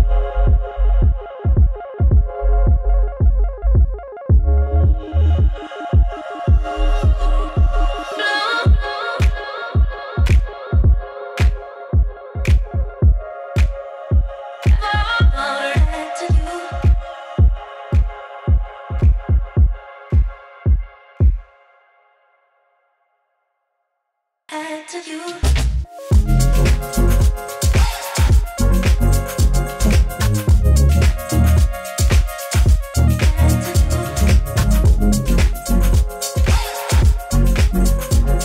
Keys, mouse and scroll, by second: 1.0 click, 3.9-7.0 drag, 8.4-10.8 typing, 10.5 click, 20.7 ctrl+click, 22.0 click, 23.0-24.2 typing, 25.2-28.1 drag, 26.0-27.2 typing, 30.7-38.4 drag.